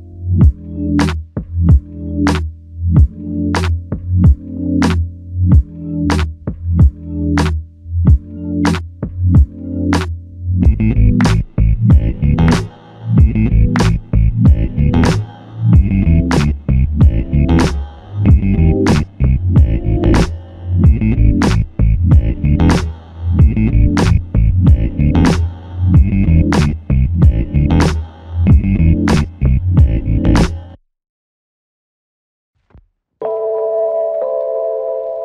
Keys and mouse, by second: 0.0 alt+click, 2.8 double click, 6.6 alt+click, 11.7 alt+click, 22.1 alt+click, 24.3 alt+click, 25.8 double click, 32.0 double click.